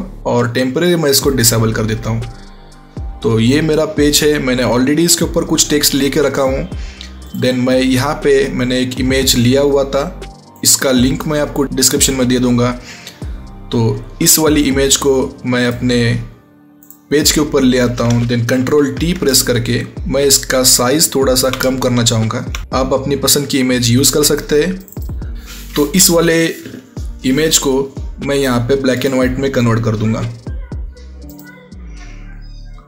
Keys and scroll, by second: 18.5 ctrl+t.